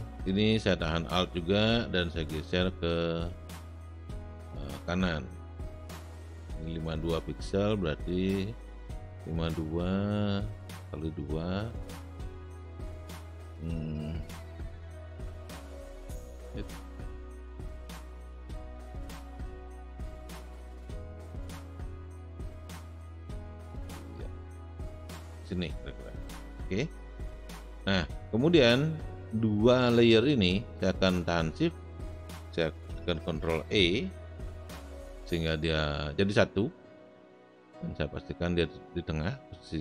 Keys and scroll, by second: 33.9 ctrl+shift+e.